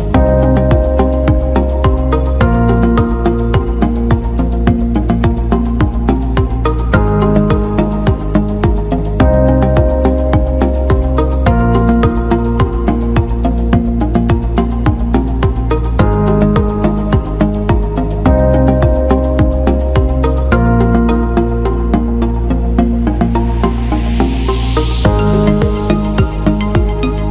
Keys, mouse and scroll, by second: 2.0 alt+middle click, 2.6 alt+shift+middle click, 3.6 alt+middle click, 8.7 alt+middle click, 10.0 alt+middle click, 10.7 alt+middle click, 12.4 click, 13.2 click, 13.5-14.6 alt+middle drag, 15.5 alt+middle click, 16.7 alt+middle drag, 18.7 click, 19.5-20.4 alt+middle drag, 20.8 click, 21.6-22.0 alt+middle drag, 22.4 Tab, 23.6 middle click, 24.2 middle click, 25.4 click.